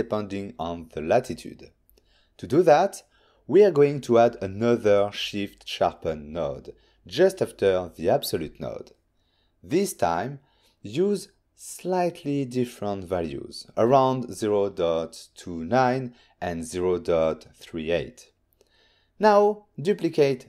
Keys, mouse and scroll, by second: 0.7 click, 2.7 shift+a, 5.0 click, 5.3 f, 8.3 click, 8.8 click, 11.1 click, 12.5 click, 13.0 click, 13.8 ctrl+shift+click, 18.3 Return, 18.3 typing, 19.3 click.